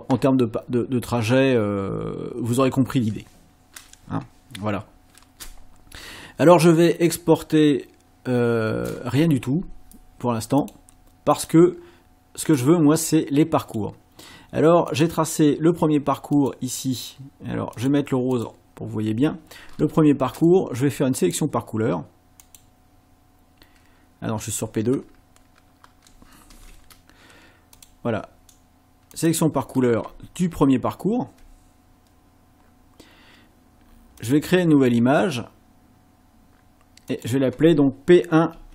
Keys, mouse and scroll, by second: 10.6 click, 11.3 click, 12.5 click, 13.7 click, 14.9 click, 16.4 click, 17.8 click, 18.3 click, 21.2 click, 22.4 click, 26.5 ctrl+z, 27.8 click, 29.1 click, 30.4-31.2 ctrl+scroll up 4, 34.2 click, 37.1 click, 38.5 BackSpace.